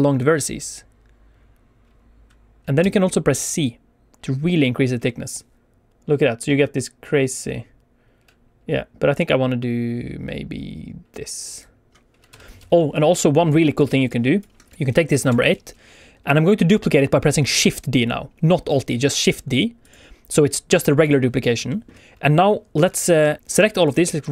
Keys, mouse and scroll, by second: 2.7 c, 11.4 right click, 11.4 click, 12.2 Tab, 12.9 click, 13.7 x, 14.0 click, 14.7 click, 14.7 x, 15.2 shift+d, 19.8 click, 21.6 shift+middle click, 23.0 shift+click, 23.3 click, 23.4 click, 23.5 click, 24.0 right click.